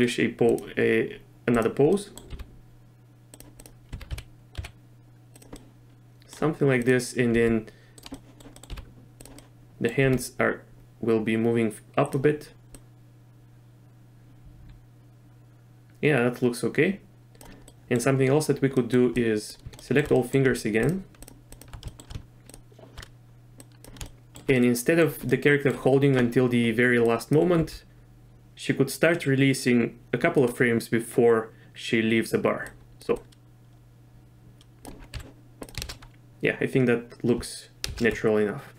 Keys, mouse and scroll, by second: 0.5 click, 1.9-2.2 middle drag, 2.3 r, 3.9 r, 5.7-6.3 middle drag, 6.8 click, 7.3 r, 8.1 middle click, 8.7 r, 9.5 middle click, 10.0 r, 12.7-17.4 drag, 17.7-18.0 middle drag, 18.8 middle click, 19.3 drag, 19.8 shift+middle drag, 20.1 middle click, 20.8 shift+click, 21.2-21.6 shift+drag, 21.9 shift+middle drag, 23.6 click, 24.0-24.4 shift+middle drag, 24.6-25.0 middle drag, 25.3-25.7 middle drag, 27.0 drag, 27.6 g, 32.7-33.0 drag, 33.2-34.9 drag, 35.1 z, 35.8 shift+space, 37.9 shift+space.